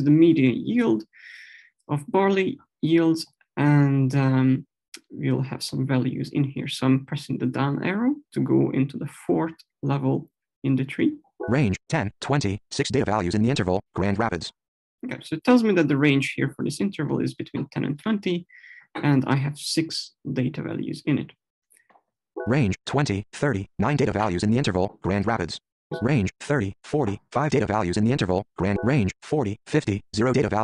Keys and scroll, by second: 10.7 Down, 22.1 Right.